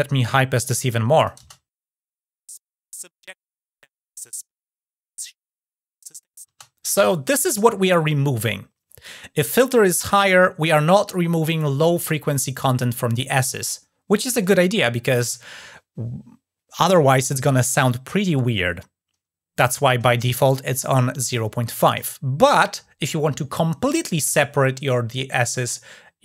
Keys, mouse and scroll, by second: 1.0 click, 20.1 shift+click.